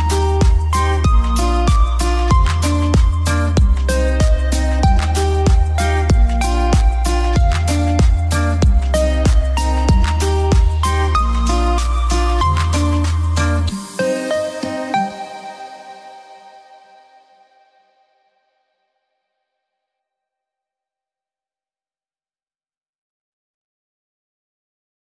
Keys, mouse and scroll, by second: 1.2 F3, 2.2 click, 2.8 F2, 3.0-4.3 drag, 4.8 alt+c, 5.0 w, 6.4 p, 6.7 click, 7.4 right click, 8.0 click, 10.7 F2, 10.8 click, 12.5 F3, 13.1 right click, 13.6 click, 16.2 F3, 17.1 click, 18.1 F2, 18.3-21.9 drag, 21.9 F2, 22.1-25.1 drag.